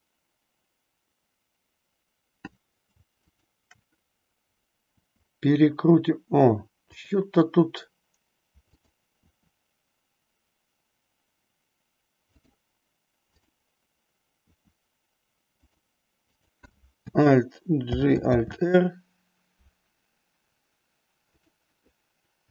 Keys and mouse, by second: 3.3-4.3 shift+drag, 4.8 r, 7.0 click, 8.7-10.0 drag, 10.1 r, 12.3 click, 14.5 r, 15.7 click, 16.2-17.2 drag, 17.8 alt+g, 18.3 alt+r, 21.3-22.5 drag.